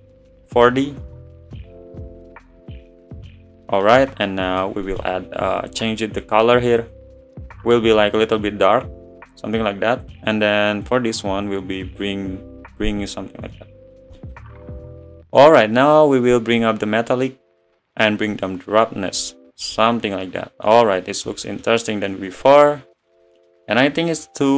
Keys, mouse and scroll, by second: 7.3-8.3 drag, 11.9-15.7 drag, 15.7-17.8 middle drag, 17.8-21.5 drag, 21.5-23.3 middle drag, 23.3 scroll up 5.